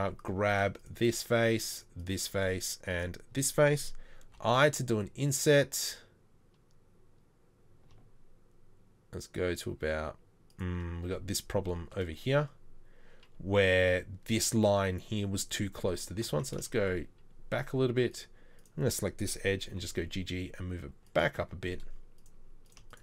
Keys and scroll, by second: 16.3 ctrl+z, 19.8 g.